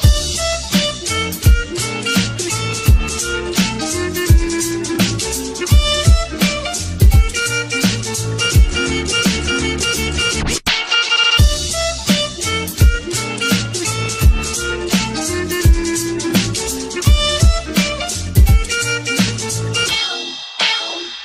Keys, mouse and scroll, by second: 1.0 space, 2.2 space, 5.4 right click, 6.4 space, 6.7 space, 7.3 space, 7.4 ctrl+-, 8.2 ctrl+-, 10.1 space, 10.1 ctrl+-, 10.4 space, 12.0 space, 13.0 space, 14.8 space, 16.2 space, 19.6 space, 19.9 space.